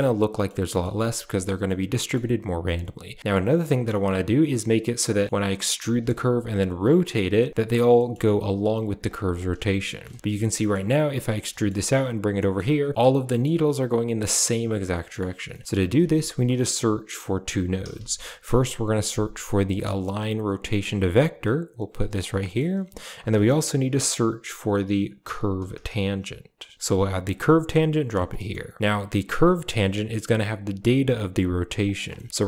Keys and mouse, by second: 0.0-0.3 middle drag, 0.7 shift+middle drag, 1.7-2.0 middle drag, 2.8 shift+middle click, 3.5 Tab, 3.6 middle click, 5.5 e, 6.2 r, 7.1 g, 8.0 shift+middle click, 8.8 r, 9.1 g, 9.5 Tab, 9.8 middle drag, 10.2 a, 10.3-10.6 middle drag, 11.5 shift+click, 12.3 click, 12.9 click, 13.3 shift+click, 14.6 a, 15.0 middle drag, 15.5 shift+middle click, 15.8 shift+a, 22.4 middle click, 23.1 shift+a, 28.3 middle click, 28.7 middle click, 29.4 click, 31.8 click, 32.0 middle click.